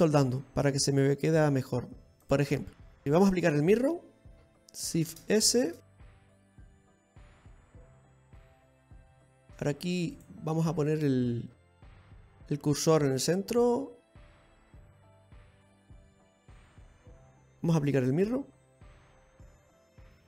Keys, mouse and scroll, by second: 0.4 middle click, 2.8 click, 4.0-4.6 scroll down 7, 5.3-5.7 scroll up 3, 5.8 shift+s, 7.8-8.3 scroll down 3, 8.1 middle click, 10.8 click, 12.4 Tab, 14.2 click, 17.1-17.4 scroll down 2, 17.4 middle click, 18.7 click.